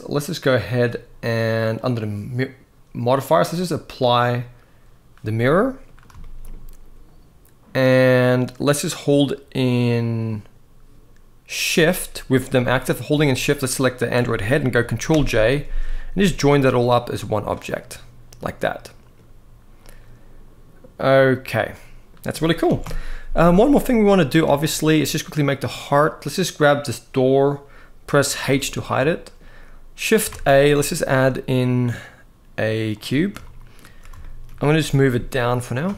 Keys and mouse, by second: 1.5 click, 3.4-3.9 drag, 5.1-5.5 middle drag, 5.9 shift+middle drag, 12.3 g, 13.4 shift+click, 14.8 ctrl+j, 15.9 g, 17.4-18.9 middle drag, 21.5 middle click, 22.5 alt+a, 22.6 KP_1, 24.3 shift+middle drag, 25.2 click, 28.2 h, 28.8 shift+middle click, 30.2 shift+a, 33.1-33.5 shift+middle drag, 33.9 shift+middle drag, 34.5 g, 34.8 z, 35.4 click, 35.7 shift+middle click.